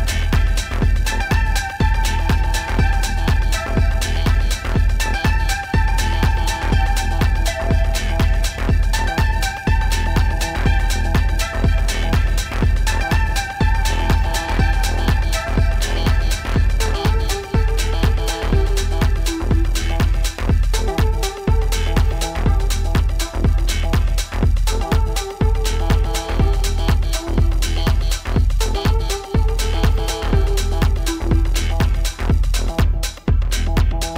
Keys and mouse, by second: 5.3 click, 6.3 click, 10.9 click, 12.0 click, 18.2 click, 24.3 click.